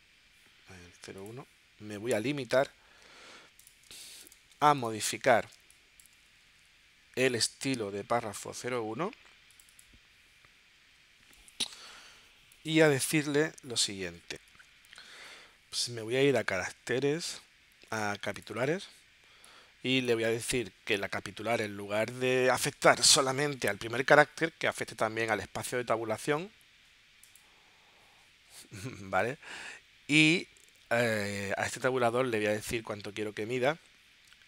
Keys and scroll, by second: 3.9 space, 5.6 space.